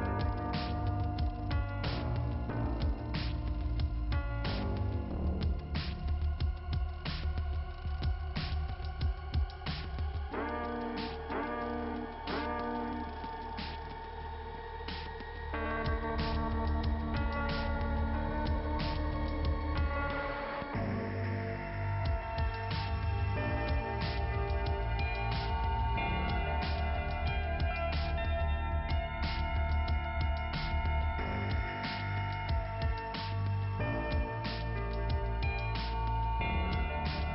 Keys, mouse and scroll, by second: 1.3 click, 1.3 click, 2.7 click, 3.7 click, 4.4 click, 4.5 click, 4.8 BackSpace, 5.3 click, 5.6 click, 6.4-8.4 typing, 9.4 Return, 10.4 Return, 15.5 middle click, 19.6 click, 20.6 click, 31.9-32.9 scroll down 2, 32.9 click, 34.2 click, 35.1 click, 35.2 click, 37.1 click.